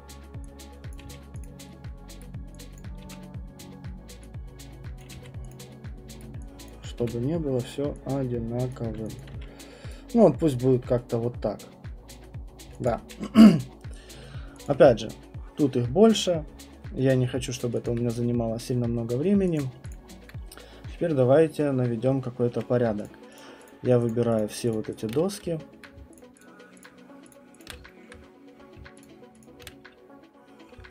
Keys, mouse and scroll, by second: 0.9 click, 1.0 q, 1.4 click, 2.2 right click, 2.8 click, 3.0 w, 5.0 click, 5.1 q, 5.5 click, 6.2 right click, 6.6 click, 7.0 w, 8.7 click, 9.2 alt+click, 9.3 q, 9.9 right click, 10.1-11.3 scroll, 12.2 alt+click, 12.4 scroll, 12.6 middle click, 12.8 alt+click, 14.1 middle click, 14.6 alt+click, 17.6 alt+middle click, 17.7 alt+middle click, 17.8 alt+click, 18.1 click, 18.4 middle click, 19.5 click, 19.9 click, 21.3 middle click, 21.6 middle click, 21.7 alt+middle click, 23.0 click, 23.4 shift+click, 23.7 shift+click, 24.4 shift+click, 24.7 shift+right click, 25.7 alt+middle click, 26.4 shift+right click, 27.6 shift+click, 28.0 alt+middle click, 29.0 shift+click.